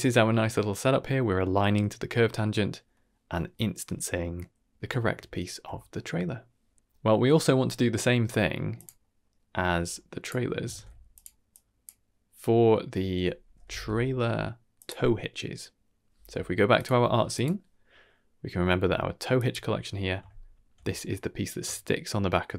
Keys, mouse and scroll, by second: 0.2 scroll down 2, 0.4-1.0 middle drag, 4.1-4.8 middle drag, 5.1-5.4 shift+middle drag, 5.6 scroll down 2, 5.9 middle click, 8.0 middle click, 8.3-8.7 scroll up 2, 8.7 click, 8.9 middle click, 9.7 middle click, 10.1 click, 10.3 middle click, 10.6 ctrl+shift+d, 11.4-14.8 drag, 16.7 click, 19.3 click, 20.0 scroll up 2, 20.3 shift+middle drag, 20.7-21.2 scroll up 2, 21.0 middle drag, 21.7-22.1 shift+middle drag.